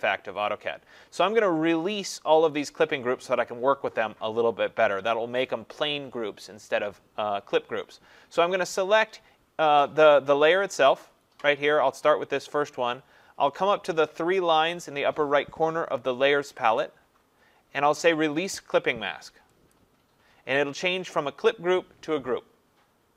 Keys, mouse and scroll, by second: 16.8 click, 19.8 click.